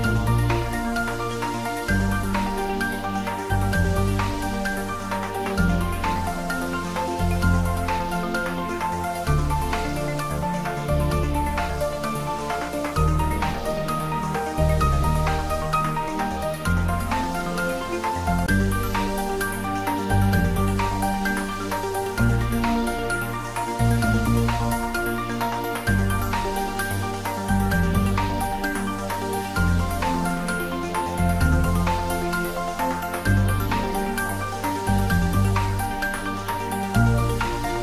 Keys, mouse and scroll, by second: 4.3 s, 5.9 click, 6.1 s, 7.3 click, 9.9 scroll down 1, 10.6-11.9 middle drag, 11.9 scroll up 1, 13.1 s, 15.2 click, 15.6 middle click, 16.8 scroll down 1, 17.2 middle click, 18.4 scroll up 1, 19.4-21.1 middle drag, 21.1 scroll down 1, 21.5-25.6 middle drag, 25.6-29.1 middle drag, 29.1 shift+z, 30.2 middle click, 30.8 shift+z, 31.0 middle click, 32.0-33.9 typing, 35.0 click, 35.4-37.0 middle drag, 36.8-37.6 typing, 37.7 click.